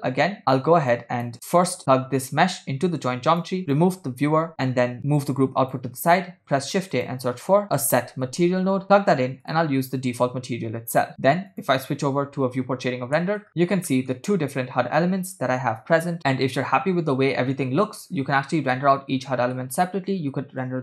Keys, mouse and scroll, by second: 0.9-1.5 drag, 2.5-3.5 drag, 3.7 click, 4.6 scroll down 1, 4.6 c, 4.6 x, 5.0 click, 6.2 shift+a, 9.9-11.1 drag, 11.6 click, 12.7 scroll down 4, 13.3 shift+middle drag, 13.5 scroll down 1, 14.1 shift+middle click, 14.5 space, 17.9 space, 18.9 shift+middle click, 20.6 click.